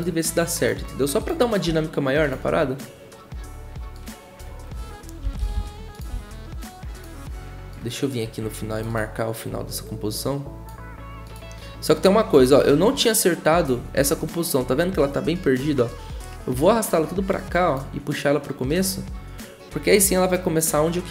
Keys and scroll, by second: 1.6 s, 5.2-6.1 typing.